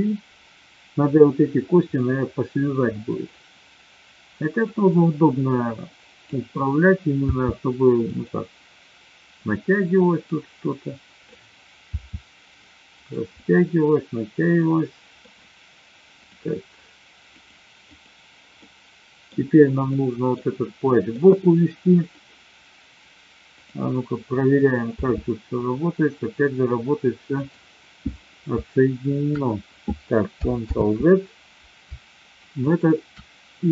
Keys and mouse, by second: 3.1 click, 4.6-6.3 drag, 7.2 r, 10.3-11.5 drag, 11.8 r, 12.9 click, 13.2-15.1 middle drag, 16.2-17.5 drag, 17.8 click, 18.6-19.2 middle drag, 19.8-20.3 middle drag, 20.8 middle click, 21.9 click, 23.5-24.3 drag, 24.8 r, 30.8 ctrl+z, 32.6-33.5 shift+drag.